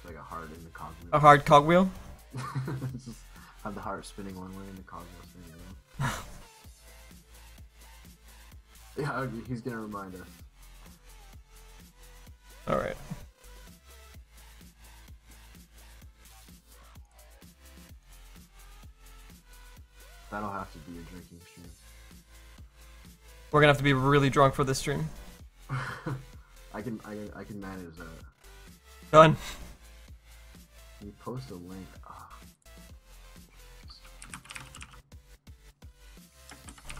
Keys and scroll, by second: 28.1 ctrl+z, 28.6 ctrl+z, 29.1 ctrl+z.